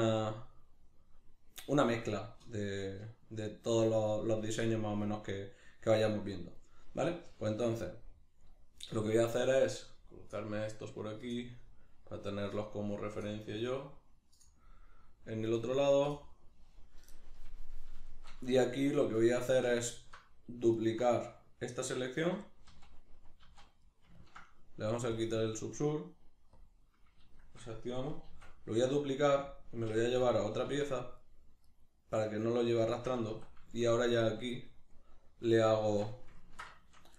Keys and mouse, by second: 17.4 middle click, 18.5 Tab, 18.9 shift+middle click, 20.7 alt+right click, 21.3 middle click, 22.1 alt+right click, 22.5-25.1 middle drag, 22.7 z, 25.1-27.3 drag, 27.3-28.9 shift+middle drag, 28.3 shift+d, 28.9 right click, 29.9 p, 31.2 right click, 31.7 right click, 32.1 right click, 32.9 Tab, 33.7-37.1 shift+middle drag, 35.9 alt+q.